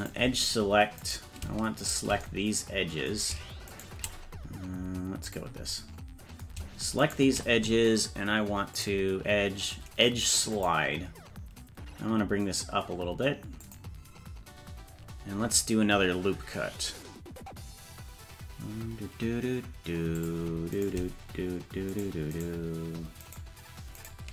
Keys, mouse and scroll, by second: 0.0 click, 1.0 right click, 1.9 shift+right click, 3.7 shift+right click, 5.3 click, 7.0 shift+right click, 8.8-13.7 drag, 20.2 click, 20.8 right click, 21.9 shift+right click, 22.3 shift+right click, 23.3 shift+right click, 24.0 shift+right click.